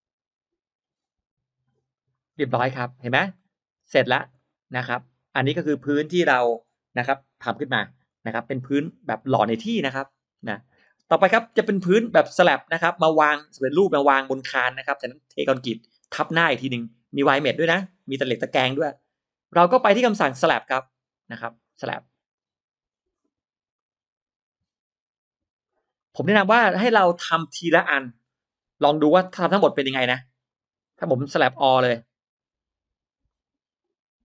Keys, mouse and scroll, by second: 1.8 click, 2.1-2.5 scroll down 1, 2.5 click, 2.5 space, 2.9-3.5 scroll up 1, 3.2 middle click, 3.3 click, 3.3 space, 3.7-4.4 scroll down 1, 4.3 middle click, 7.9-8.3 scroll down 1, 8.3 middle click, 8.9-9.3 scroll up 1, 10.7-11.1 middle drag, 20.7 drag, 21.1 click, 21.3 click, 22.2 click, 23.6 click, 25.5 click, 29.3 click, 30.3 click, 31.7 click, 33.1 click, 34.1 click.